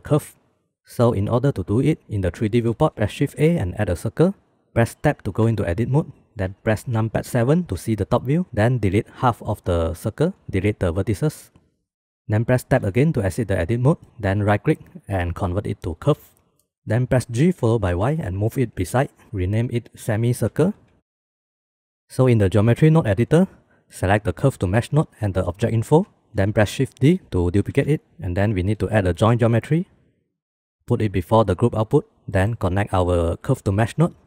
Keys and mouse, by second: 2.2 shift+drag, 3.0 shift+a, 5.2 Tab, 6.9 KP_7, 8.0 shift+click, 9.0 click, 9.9 x, 12.1 Tab, 12.5 Tab, 13.8 middle drag, 14.2 middle click, 16.6 middle drag, 16.7 click, 16.8 ctrl+z, 16.8 g, 19.9-22.0 drag, 22.0 ctrl+x, 22.2 ctrl+s, 23.0 middle click, 23.1 click, 23.2 middle click, 23.9 click, 26.3 shift+d, 27.7 click, 28.2 shift+a, 33.0-34.2 drag.